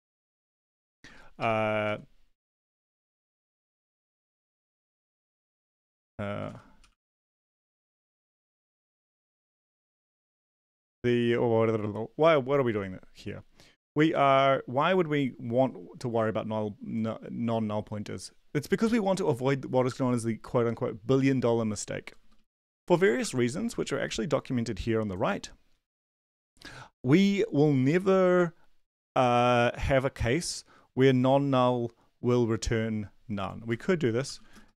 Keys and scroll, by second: 0.0-1.8 typing, 0.3 Left, 0.7 Left, 1.7 Down, 2.9 Left, 2.9 Return, 3.1 Return, 3.9 BackSpace, 4.0 Tab, 4.2 Tab, 4.6 Return, 6.2-10.2 typing, 10.0 Down, 22.0 Down, 22.2 Down, 22.3 Down, 23.2 BackSpace, 33.8-34.7 typing.